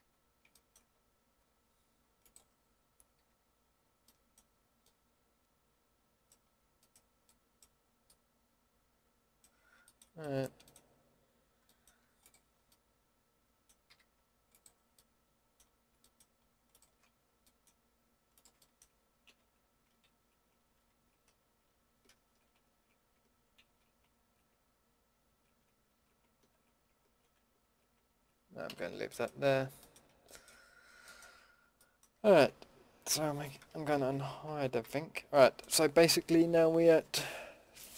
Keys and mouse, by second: 0.0 a, 3.2 a, 12.2-12.9 middle drag, 13.2 middle click, 13.4 middle click, 13.9 a, 16.1-17.2 drag, 17.6-18.5 middle drag, 19.3 ctrl+x, 20.0 ctrl+z, 20.7 ctrl+x, 22.0 ctrl+z, 23.6 ctrl+x, 24.1 ctrl+z, 25.2 ctrl+x, 25.9 ctrl+z, 26.4 ctrl+x, 27.0 ctrl+z, 27.6 ctrl+x, 28.0 ctrl+z, 28.6 a, 32.1 Tab, 32.4 Tab, 33.5 alt+h, 33.9 alt+h, 34.8 a.